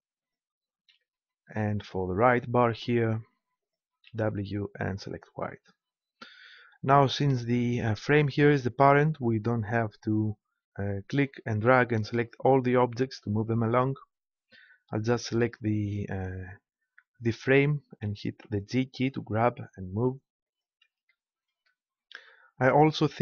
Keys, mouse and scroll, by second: 2.6 right click, 3.5-5.4 drag, 8.1-12.4 right drag, 18.0 g, 20.6-22.3 drag.